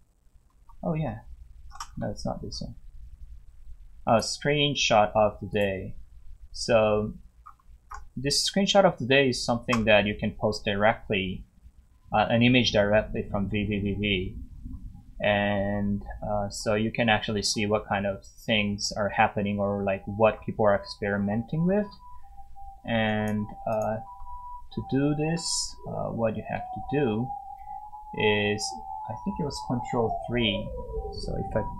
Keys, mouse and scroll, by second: 0.2 scroll down 1, 2.5 scroll down 1, 4.1 click, 5.0 scroll down 1, 5.5 click, 7.4 scroll up 1, 10.0 scroll down 1, 13.5 scroll down 1, 14.2 scroll down 1, 16.1 scroll down 1, 17.4 scroll down 1, 18.4 scroll up 1, 18.8 scroll, 18.8 scroll down 1, 21.6 scroll down 1, 23.1 click, 27.6 scroll down 1.